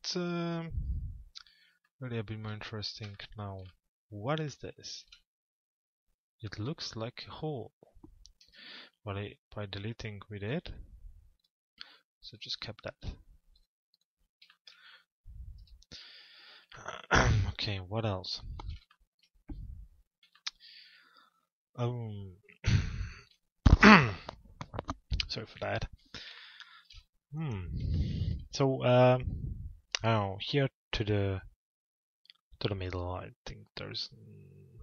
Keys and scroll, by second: 15.2 F4.